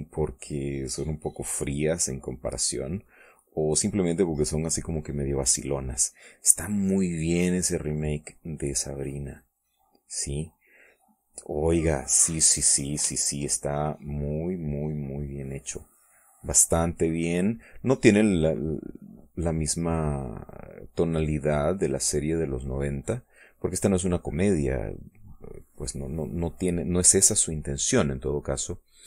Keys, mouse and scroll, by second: 7.1 middle click, 8.1-10.9 drag, 11.2 middle click, 12.3-13.5 drag, 13.9 ctrl+click, 14.3-16.3 ctrl+drag, 16.7-21.4 drag, 21.6-22.9 drag, 27.6 click, 28.1 click, 28.1 right click.